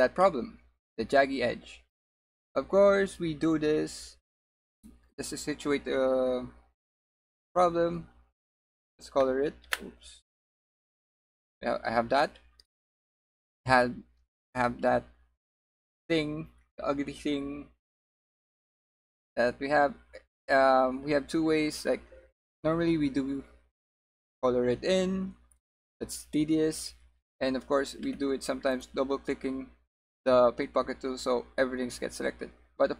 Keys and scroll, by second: 12.3 g.